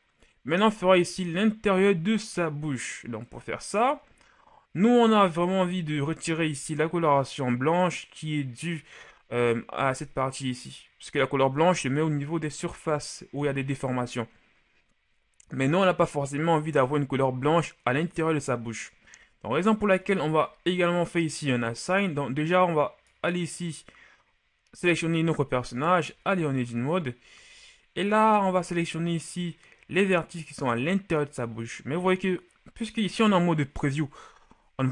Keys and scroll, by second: 26.1 Tab.